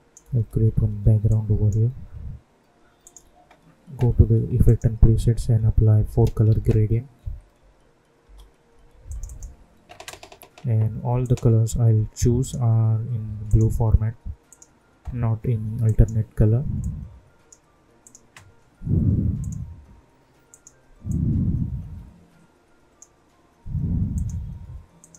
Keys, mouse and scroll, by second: 0.2 Return, 1.2-3.0 drag, 5.1 ctrl+a, 6.0 4, 6.2 space, 6.5 c, 9.0-24.1 drag.